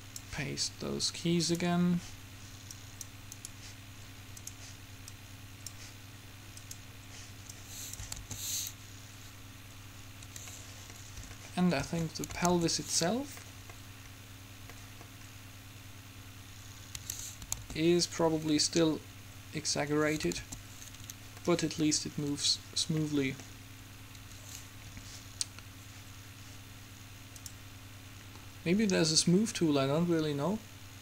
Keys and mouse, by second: 3.5-5.5 middle drag, 5.5-9.5 drag, 8.4 alt+a, 10.4 Escape, 12.6 alt+a, 17.0 Escape, 17.7 alt+a, 20.0 Escape, 20.6 alt+a, 24.4 Escape, 29.2 click.